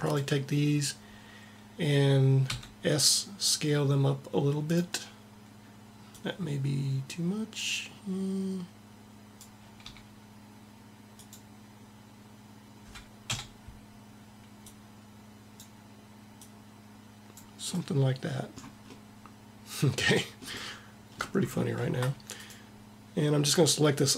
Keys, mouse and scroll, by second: 1.5 click, 2.2 s, 5.9-7.7 drag, 9.5 s, 9.7 s, 13.1 KP_7, 14.5 click, 22.2-24.1 drag.